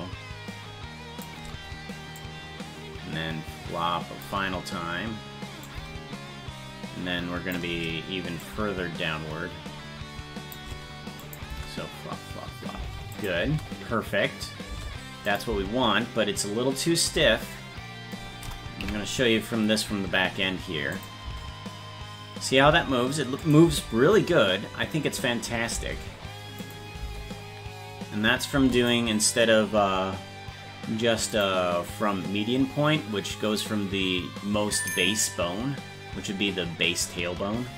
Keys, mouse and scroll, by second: 2.2-4.3 drag, 5.7-7.6 drag, 8.5-11.4 drag, 11.5 space, 13.2 click, 13.2 space, 13.5 space, 15.3 click, 15.3 space, 17.6 space, 18.8 KP_Decimal, 19.7-21.0 scroll down 1, 21.0 click, 21.0 scroll down 6, 21.3 space, 23.5 click, 23.5 space, 23.7 space, 26.7 click, 26.7 space, 28.8 click, 28.8 space, 31.4-36.3 drag.